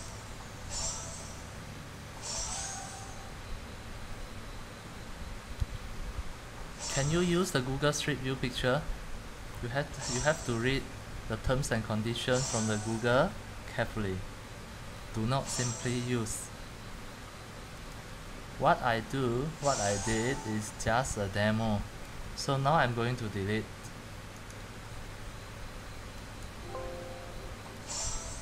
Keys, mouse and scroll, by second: 2.1-3.4 middle drag, 2.1 scroll, 3.4-3.7 scroll, 4.4 middle click, 4.7-5.1 scroll, 10.3 scroll, 11.8 scroll down 4, 13.6 scroll, 18.2 click.